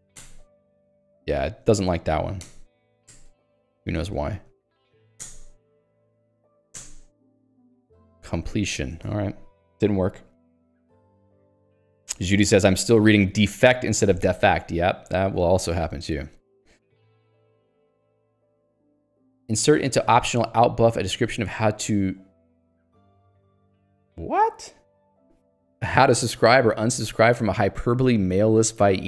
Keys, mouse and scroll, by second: 0.0-0.1 typing, 0.3 alt+Return, 1.1 h, 2.5 alt+Return, 3.5 Escape, 3.9 shift+a, 4.2 Escape, 4.3 h, 4.9 x, 5.3 alt+Return, 5.9 Escape, 6.1 shift+i, 6.4 Escape, 6.9 alt+Return, 7.3 Escape, 7.6 l, 9.0 ctrl+s, 9.1 Escape, 16.2 click, 16.8 click, 17.3 Escape, 17.7 j, 18.0 ctrl+d, 19.1 k, 20.3 j, 20.5 l, 21.7 j, 28.6 k.